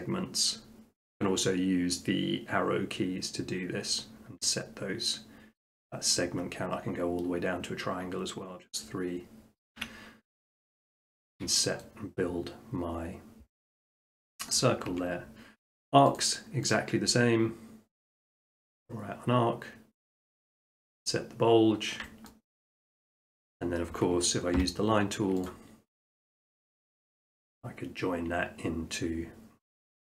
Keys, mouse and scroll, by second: 0.8 ctrl+scroll, 1.1 ctrl+scroll down 7, 1.3-3.5 ctrl+scroll down 14, 3.5-5.7 ctrl+scroll, 6.1-6.9 ctrl+scroll, 8.0-8.9 ctrl+scroll, 8.9-9.9 ctrl+scroll, 10.6 click, 11.3 shift+middle click, 11.8 middle click, 12.4 middle click, 13.6 middle click, 14.0 middle click, 14.5 shift+middle click, 14.9 Tab, 16.2 click, 16.7 click, 18.8 click, 21.0 click, 21.6 middle click, 21.7 middle click, 22.3 scroll, 22.6 middle click, 22.8 middle click, 23.4 shift+middle click, 25.5 click, 26.9-28.0 drag, 29.6-30.1 middle drag.